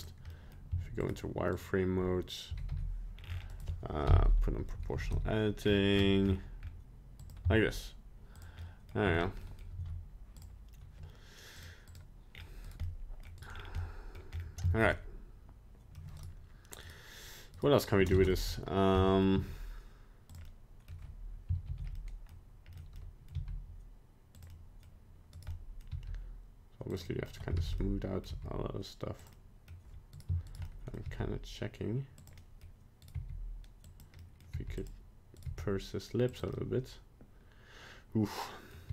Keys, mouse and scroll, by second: 0.3 middle click, 1.0 alt+right click, 1.5 alt+right click, 2.5 g, 4.0 o, 4.9 g, 7.4 z, 8.6 middle click, 9.0 Tab, 9.1 scroll down 3, 9.4 middle click, 9.7 z, 11.5 click, 11.9 click, 12.3-12.6 scroll down 3, 12.6 right click, 12.8 middle click, 13.4 right click, 13.5 scroll down 2, 13.8 middle click, 14.3-14.6 scroll up 3, 14.6 shift+middle click, 14.9 middle click, 15.9 middle click, 15.9 shift+middle click, 16.2 right click, 16.8 right click, 17.5 right click, 18.3 ctrl+Tab, 18.5 right click, 19.0 middle click, 19.4 g, 20.5 middle click, 20.8 middle click, 21.8 alt+g, 21.9 middle click, 22.0 middle click, 22.7 middle click, 22.9 middle click, 23.0 middle click, 23.3 g, 24.5 middle click, 25.4 right click, 25.5 middle click, 25.7 middle click, 26.0 g, 27.1 middle click, 27.7 alt+g, 27.8 middle click, 28.3 g, 29.3 middle click, 30.2 right click, 30.6 shift+right click, 30.6 middle click, 31.2 g, 32.4 middle click, 33.1 right click, 33.3 g, 34.2 middle click, 34.6 g, 35.5 right click, 35.6 g, 36.5 middle click.